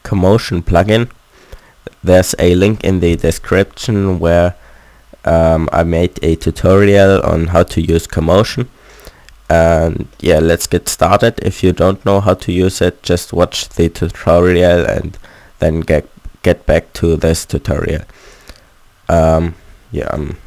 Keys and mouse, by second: 9.3-11.6 middle drag, 17.6 a, 17.8 a, 19.0 a, 19.2 a, 20.1 i.